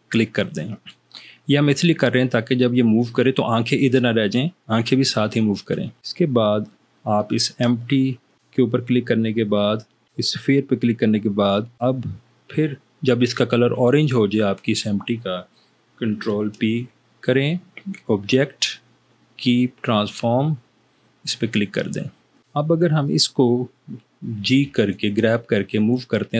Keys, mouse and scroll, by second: 16.8 ctrl+p, 24.8 g.